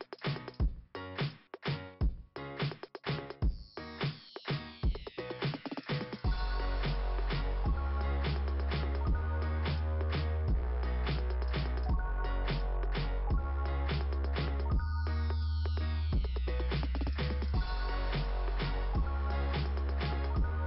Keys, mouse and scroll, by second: 3.9 click, 4.7 right click, 5.0 right click, 6.1 click, 7.0-7.4 scroll down 2, 8.1-9.2 scroll down 3, 10.8-12.2 scroll down 6, 14.4 click, 16.9 ,, 17.5 click, 18.1 click, 18.9 click, 19.2 click.